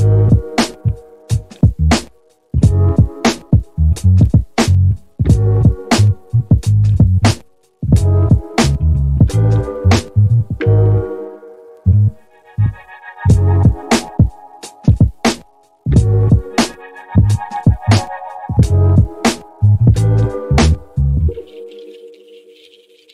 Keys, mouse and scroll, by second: 1.2-3.7 drag, 4.5 click, 5.3 g, 11.9-16.2 drag, 16.6 middle click, 18.1 click, 19.0 g.